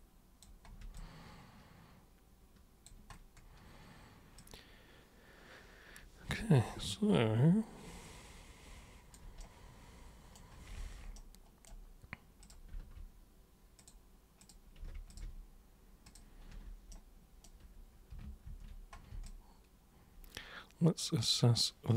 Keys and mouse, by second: 0.0 super+click, 1.0-2.9 alt+super+drag, 4.4-9.2 alt+super+drag, 9.4 super+right click, 11.1 right click, 12.4 click, 13.8 click, 14.4 click, 15.1 ctrl+shift+super+click, 16.1 super+click, 16.9 super+right click, 18.5 ctrl+super+1, 19.3-21.9 alt+super+drag.